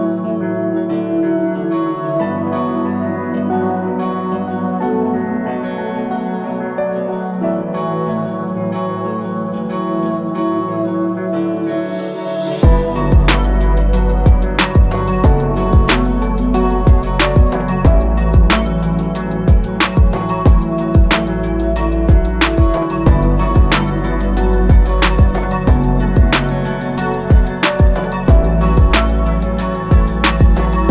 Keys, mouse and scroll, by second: 1.0-3.2 scroll up 1, 6.4 click, 20.6 ctrl+z, 21.8 click, 22.1 alt+scroll down 1, 22.4 scroll up 1, 24.2 click, 26.5-27.4 scroll down 1, 30.2 scroll up 1, 30.5 scroll down 1.